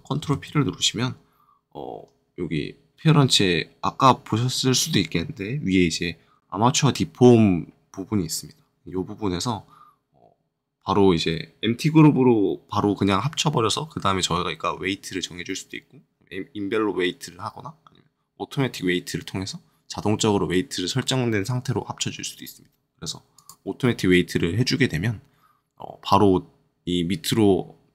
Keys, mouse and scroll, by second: 0.2 ctrl+p, 23.3-27.0 drag.